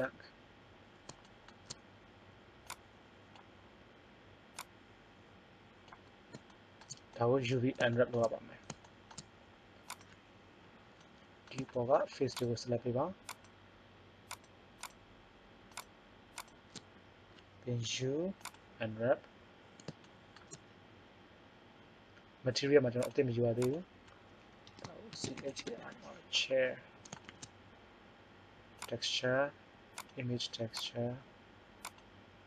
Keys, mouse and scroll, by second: 0.8 scroll up 2, 2.6 click, 3.3-5.6 drag, 5.8 click, 9.9-11.7 right drag, 17.8 u, 23.0-25.8 drag, 27.2 shift+a.